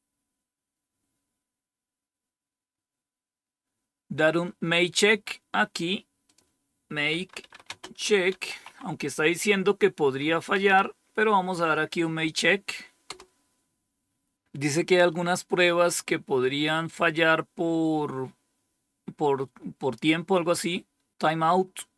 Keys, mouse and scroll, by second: 6.2 click, 6.8-9.1 typing, 10.2-11.1 typing, 13.0 typing.